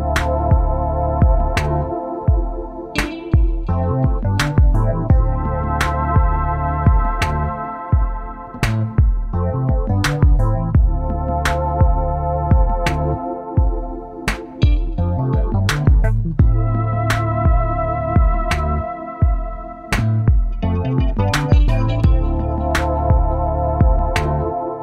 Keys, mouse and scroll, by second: 0.0 ctrl+0, 7.5 double click, 14.7 BackSpace, 17.2 BackSpace, 17.7 shift+y.